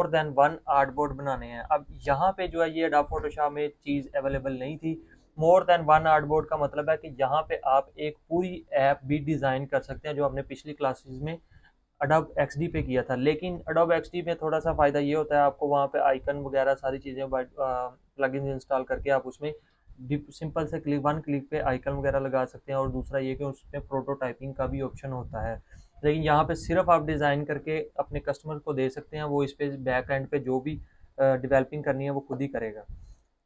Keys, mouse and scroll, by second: 0.1 click, 3.0 click.